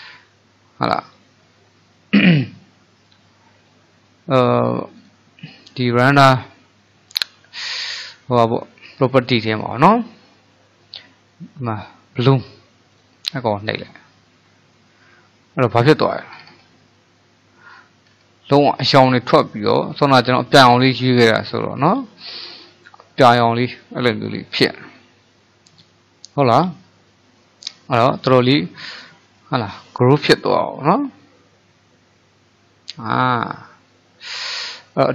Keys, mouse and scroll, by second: 5.0 click, 13.0 click, 16.4-17.2 scroll down 4, 17.3-18.2 middle drag, 18.2-18.7 scroll up 3, 18.7-27.8 middle drag, 28.7-34.5 middle drag.